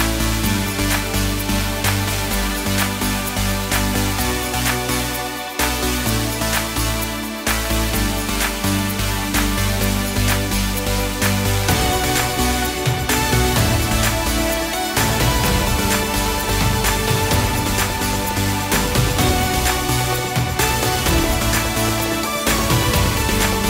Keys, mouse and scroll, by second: 0.6 middle click, 1.1 scroll down 3, 1.9 shift+click, 3.1 shift+d, 4.0 click, 5.5 KP_0, 6.3 click, 8.3 click, 13.5 middle click, 14.5-15.2 scroll down 3, 15.2 middle click, 16.9 shift+a, 18.7 click, 19.3 click, 20.7 click, 21.8 BackSpace, 22.9 click, 23.6 middle click.